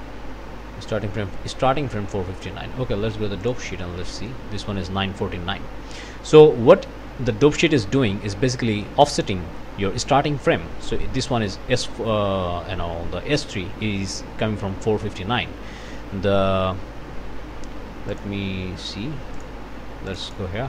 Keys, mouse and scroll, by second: 3.4 click, 4.1 click, 15.4-15.9 scroll down 1, 18.1 click, 19.4 click, 20.1 click.